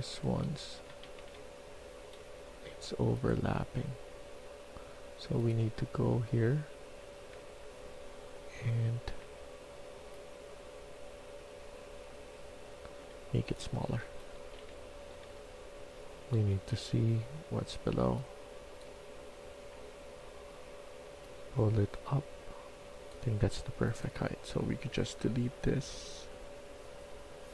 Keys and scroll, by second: 0.0-1.7 typing, 8.5 Tab, 9.1 Tab, 13.3-15.1 typing, 16.2-17.0 typing, 19.5 Caps_Lock, 20.0-20.7 typing.